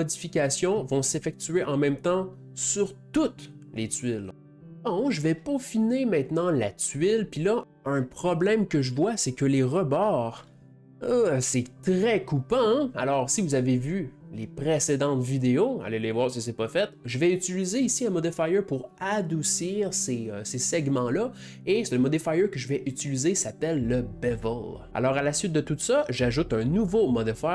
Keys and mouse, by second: 4.3 middle click, 7.6 Tab, 9.9-13.0 ctrl+middle drag, 13.6 shift+middle click, 25.1-27.3 drag.